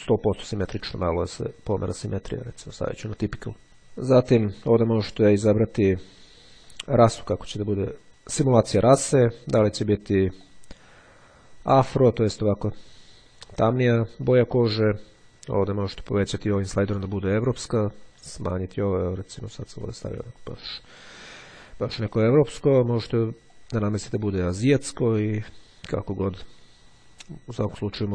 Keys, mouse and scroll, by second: 6.3-8.1 drag, 10.4-12.3 drag, 14.7-17.0 drag, 17.9-19.1 drag, 19.7-21.8 drag, 23.7-27.1 drag.